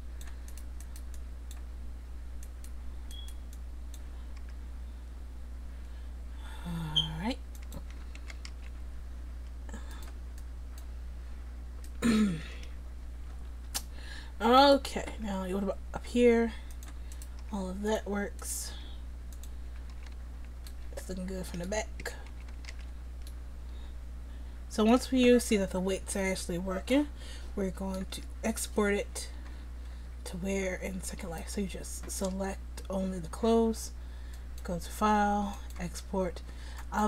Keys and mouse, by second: 4.4 r, 7.9 a, 8.2 a, 8.5 alt+r, 9.9-11.2 drag, 13.7 middle click, 14.6 right click, 15.1 r, 17.2 right click, 17.4 r, 18.7 r, 19.7 a, 20.0 a, 22.0 a, 22.3 a, 22.7 alt+r, 31.1-34.4 right drag.